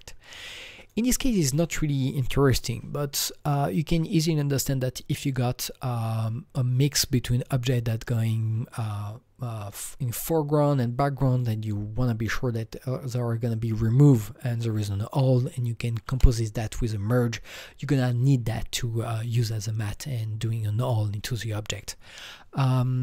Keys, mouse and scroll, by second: 0.8-3.0 drag.